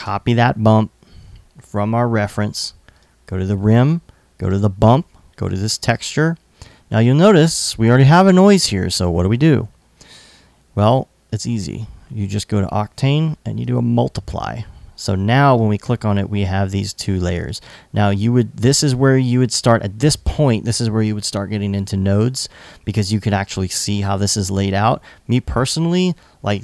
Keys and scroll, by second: 17.2 super+v.